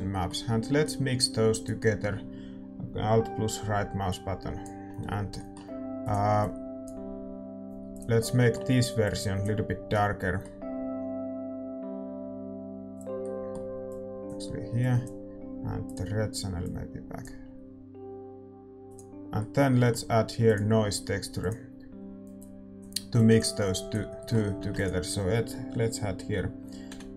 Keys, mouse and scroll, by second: 1.9-4.2 right drag, 4.2-10.8 drag, 9.4-15.0 middle drag, 14.2-27.1 drag, 19.6-27.1 right drag.